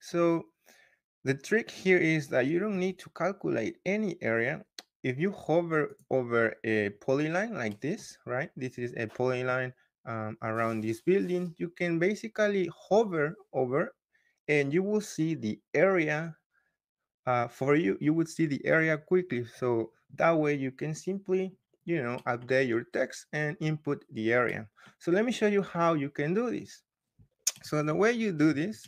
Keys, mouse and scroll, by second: 0.8-2.3 scroll, 2.3-3.6 scroll, 5.8 click, 6.3-7.6 scroll, 7.8-9.6 scroll, 9.9-10.6 scroll, 10.6-10.9 scroll down 5, 11.4-12.8 scroll up 5, 12.8-15.9 scroll up 1, 15.9 scroll up 1, 21.7-22.3 scroll down 2, 22.3 scroll up 1, 22.8-23.2 scroll down 2, 23.1 middle click, 23.6 scroll up 2, 23.7 middle click, 23.8 scroll, 24.6 middle click, 25.0 scroll, 25.6-27.4 scroll up 1, 28.4 Escape.